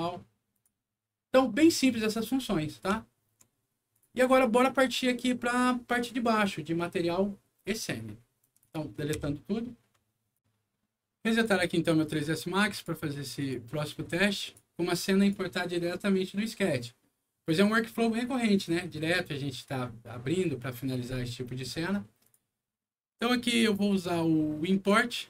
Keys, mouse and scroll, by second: 0.4 click, 2.8 alt+middle click, 3.8 alt+click, 4.3 alt+middle click, 7.2 middle click, 7.6 scroll down 2, 8.0 scroll up 2, 8.3 click, 9.1 Delete, 10.3 click, 11.2 click, 12.6 click, 13.3 click, 14.3 click, 15.1 click, 22.2 click, 23.4 click.